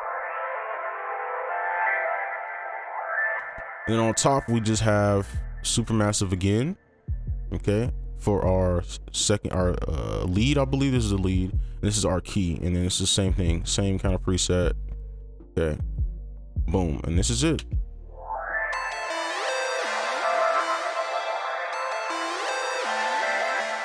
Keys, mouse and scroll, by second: 3.3 space, 9.4 double click, 17.6 space.